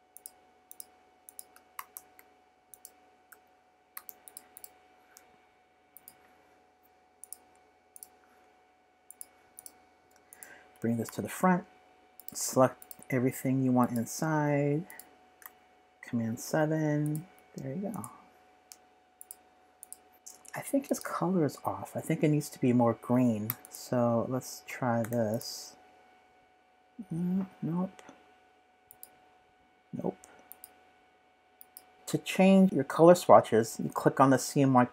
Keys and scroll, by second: 3.9 v, 11.0 shift+super+}, 16.3 super+7, 23.5 v, 25.0 i.